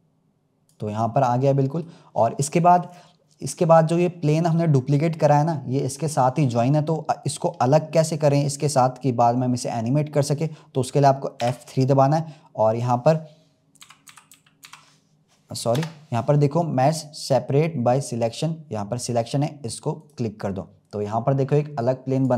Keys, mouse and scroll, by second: 1.2-11.3 middle drag, 11.3 F3, 22.1 click, 22.2-22.3 drag.